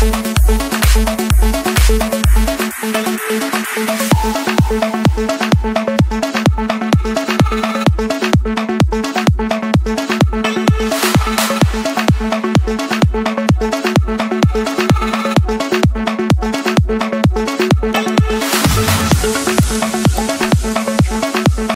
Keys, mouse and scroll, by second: 2.0-3.0 drag, 3.6-4.2 scroll, 4.4 click, 4.8 Escape.